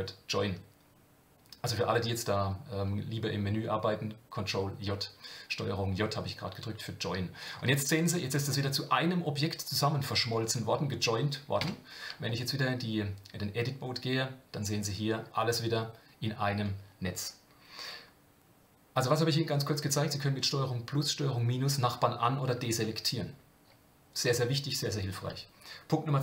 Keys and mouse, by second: 7.9 click, 11.6 Tab, 12.3-15.2 middle drag.